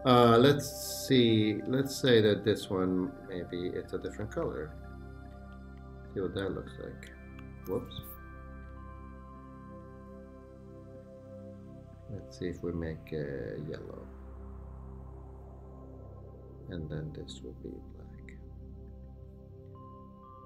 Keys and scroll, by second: 1.8 super+=, 8.2 shift+Escape, 8.7 shift+Escape.